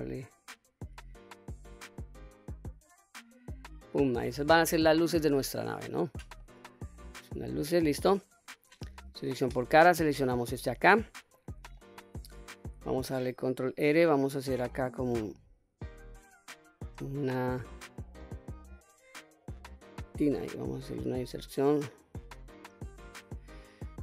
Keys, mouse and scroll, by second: 1.3-2.0 scroll up 1, 3.5 click, 3.9-4.3 scroll down 1, 4.3 middle click, 6.1 middle click, 7.0 scroll up 1, 7.2 middle click, 7.9-8.5 scroll down 1, 8.8 3, 9.4 click, 10.4 middle click, 11.5 middle click, 13.2 ctrl+r, 19.7 click, 20.2-20.8 scroll up 2, 20.8-22.7 middle drag, 23.7-24.0 drag.